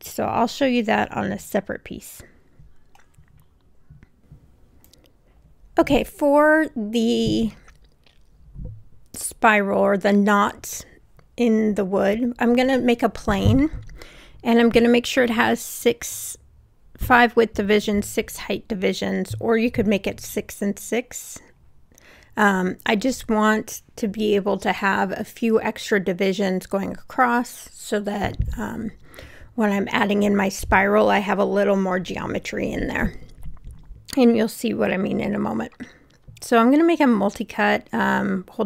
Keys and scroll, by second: 4.9 BackSpace, 13.1 6, 15.3 5, 19.0 r, 24.1 w.